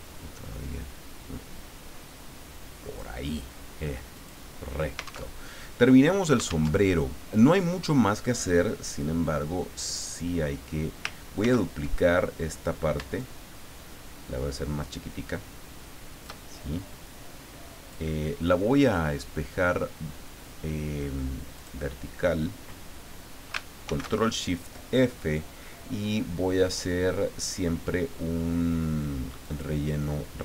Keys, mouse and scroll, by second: 4.1 click, 5.3 alt+Tab, 6.8 alt+Tab, 9.8 click, 11.4 ctrl+d, 13.2-16.4 shift+drag, 16.7-18.1 drag, 21.5 click, 23.8 ctrl+shift+f, 29.4 click.